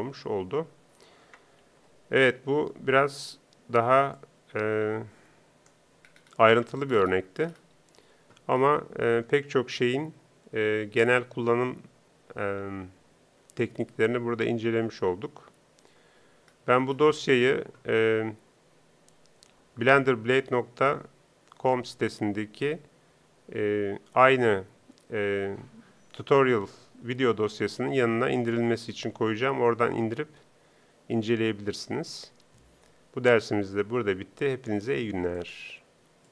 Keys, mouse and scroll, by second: 1.6 ctrl+Up.